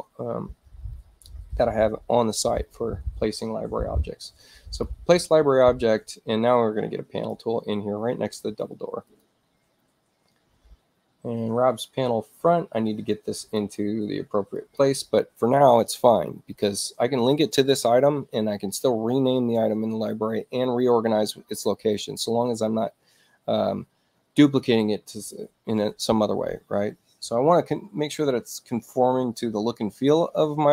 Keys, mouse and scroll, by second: 4.9-7.4 drag, 9.1 click, 10.5 middle click, 12.4-13.6 drag, 14.6 click.